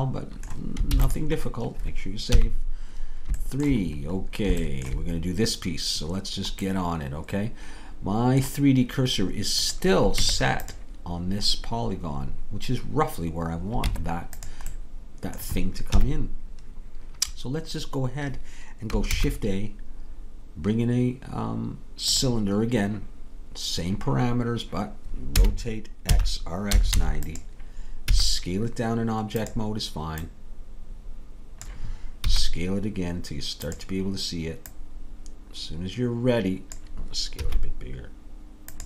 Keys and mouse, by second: 0.5 middle click, 0.9 ctrl+s, 2.3 KP_3, 3.4 click, 10.2 Tab, 13.9 Tab, 16.0 KP_3, 19.1 shift+a, 25.4 r, 28.2 s, 30.3-32.4 drag, 32.4 s, 34.7-36.8 drag, 37.5 s.